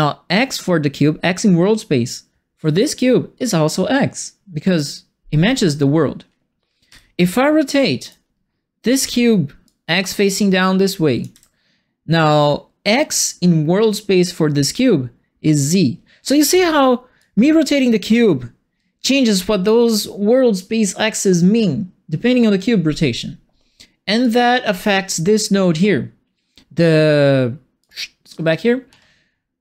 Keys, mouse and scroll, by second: 6.8 e, 7.6 right click, 8.9 e, 9.6-11.2 drag, 11.3 w, 16.4 e, 17.1-19.6 drag, 19.8 w, 24.2 click, 27.8 click, 28.9 middle click.